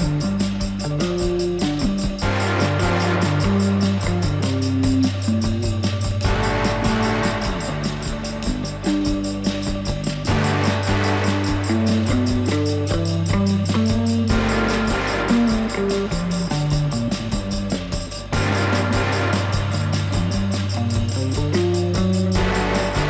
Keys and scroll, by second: 3.3 F4, 10.2 F4.